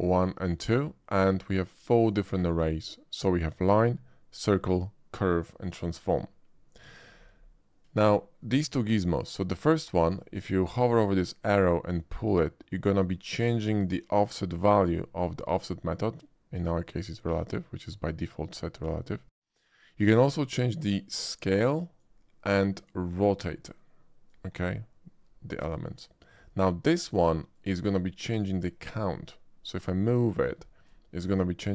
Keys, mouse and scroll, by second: 3.6 click, 6.8 click, 8.1 shift+middle drag, 11.6-13.3 drag, 18.5-19.0 shift+middle drag, 21.1-22.0 shift+drag, 22.8-24.3 drag, 26.0 shift+middle drag, 27.5-30.3 shift+drag, 30.9-31.7 middle drag.